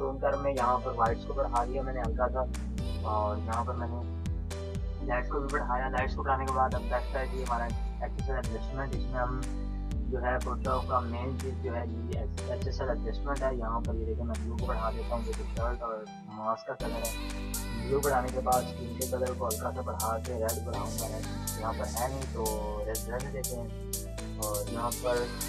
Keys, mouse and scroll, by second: 11.1-25.4 drag, 24.2-25.4 drag.